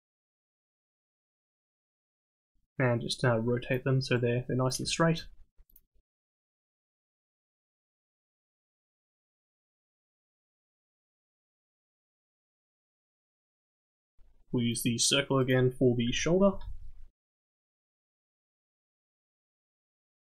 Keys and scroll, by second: 12.6 KP_3.